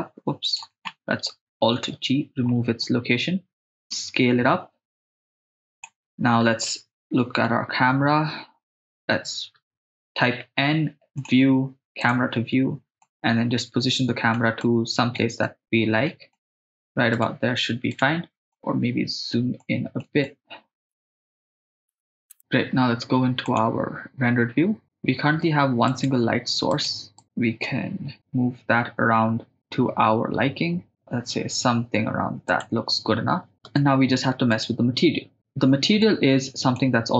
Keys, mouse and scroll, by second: 0.5 right drag, 1.8 alt+g, 3.9 s, 5.8 click, 7.4 KP_0, 10.2 n, 11.2 click, 12.0 click, 12.5 n, 13.1 middle click, 14.7 shift+middle drag, 15.5 middle click, 16.4 shift+middle click, 17.3 right click, 18.0 right click, 18.6 ctrl+middle click, 19.6 middle click, 20.3 shift+middle click, 21.0 click, 21.6 click, 21.9 click, 22.3 shift+space, 26.0 right click, 26.9 right click, 27.7 g, 32.6 click, 33.5 shift+space, 33.7 shift+space, 34.7-36.0 right drag, 36.0 click, 36.5 click.